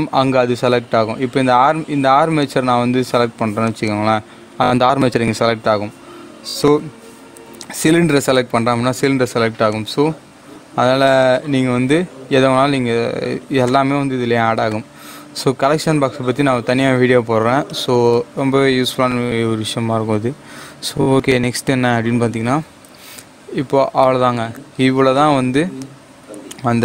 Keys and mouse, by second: 2.5 click, 6.6 click, 13.6-23.0 drag, 23.0 shift+a.